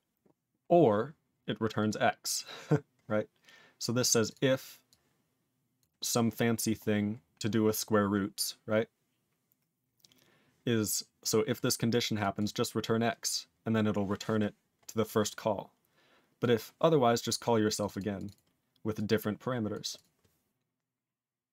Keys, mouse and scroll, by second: 1.8 click, 1.8 click, 3.8 click, 4.0 click, 4.2 click, 4.3 click, 4.9 click, 5.8 click, 12.2 click, 12.3 click, 15.1 click, 15.2 click, 16.4 click, 17.8 click, 17.8 click, 17.9 double click, 18.0 double click, 18.1 click, 18.2 click, 18.3 double click, 18.3 double click, 18.9 click, 19.7 click, 19.9 click, 20.0 click.